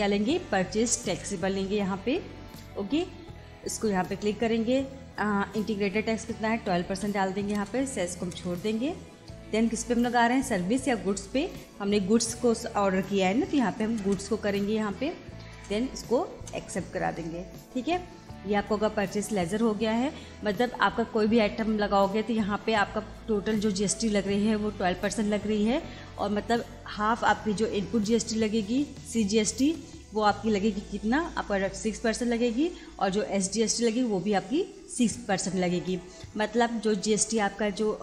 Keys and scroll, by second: 3.0 Return, 6.7 1, 6.9 2, 7.6 Return, 9.9 Up, 14.0 Return, 15.6 Return.